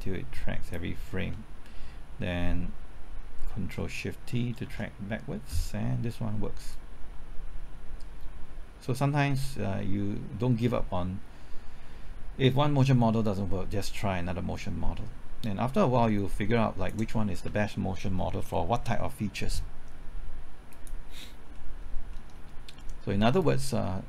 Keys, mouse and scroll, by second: 4.6 ctrl+shift+t, 6.7-17.2 drag, 18.1-19.9 scroll down 1, 20.7 click, 21.2-21.5 scroll down 1, 21.5 middle click, 21.7-22.1 scroll up 1, 22.1-23.2 middle drag, 23.4-24.0 drag.